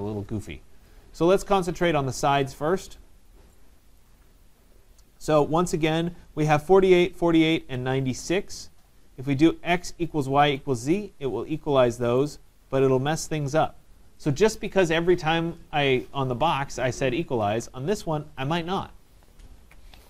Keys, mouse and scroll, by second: 1.0-1.5 scroll, 1.8 right click, 2.7 middle click, 2.7 middle click, 2.8 middle click, 3.2 middle click, 3.2 middle click, 4.0 right click, 11.0 click, 14.3 right click, 19.5 right click, 19.6 ctrl+z.